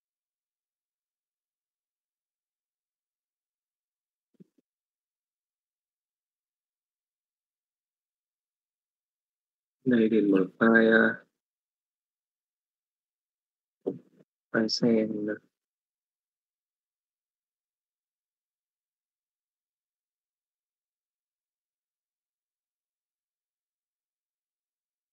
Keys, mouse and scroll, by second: 0.7 z, 3.8-4.2 middle drag, 4.8 alt+a, 5.8 KP_5, 6.3 middle click, 7.1 shift+middle click.